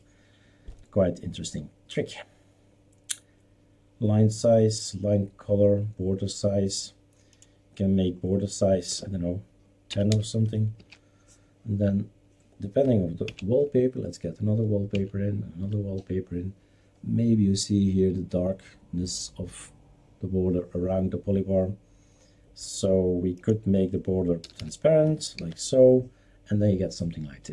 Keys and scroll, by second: 8.9-10.6 typing, 10.7 ctrl+s, 13.2 alt+Right, 14.9 alt+Right, 24.4 typing, 25.4 ctrl+s.